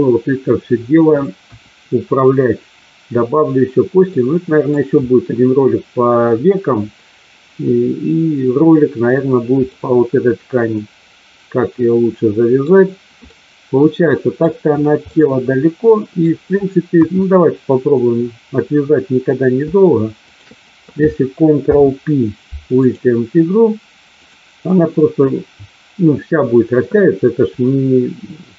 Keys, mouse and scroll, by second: 1.4 KP_1, 4.1-4.6 middle drag, 9.6-12.6 middle drag, 13.4-14.4 middle drag, 15.1-16.1 middle drag, 17.0 KP_1, 20.4 shift+click, 21.5 ctrl+p, 24.1 click.